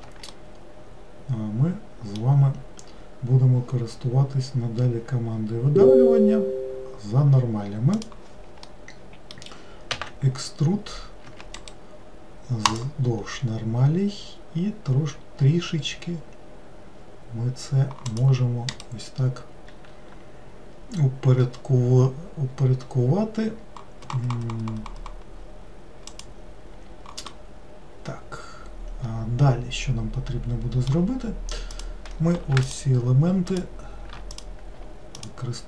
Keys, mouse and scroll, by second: 0.3-3.4 middle drag, 8.7-9.9 middle drag, 9.9 e, 11.6 right click, 12.8-14.6 right drag, 18.7 right click, 27.3-30.3 middle drag, 31.7 click, 32.7 shift+click, 33.5 shift+click, 34.3 click, 35.2 alt+click.